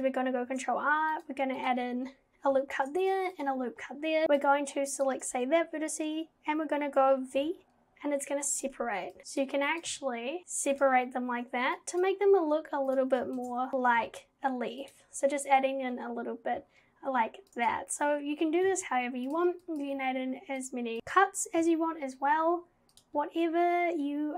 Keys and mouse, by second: 0.5 ctrl+r, 2.7 ctrl+r, 4.3 click, 5.0 click, 7.4 v, 9.2 v, 9.8 click, 9.9 v, 10.4 g, 11.8 click, 12.3 g, 13.4 ctrl+z, 13.7 v, 14.0 g, 18.7 v, 19.8 click, 20.0 v, 21.0 click, 21.6 g.